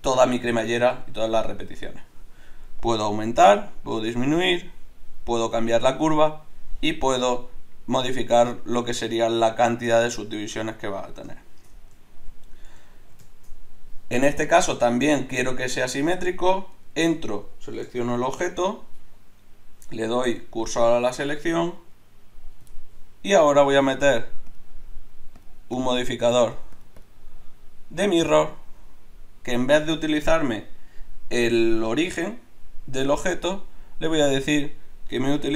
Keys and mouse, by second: 2.8-11.4 drag, 11.6 middle click, 12.1 middle click, 12.5 middle click, 12.8 middle click, 18.2 shift+s, 24.0-28.7 drag, 34.2-35.5 drag.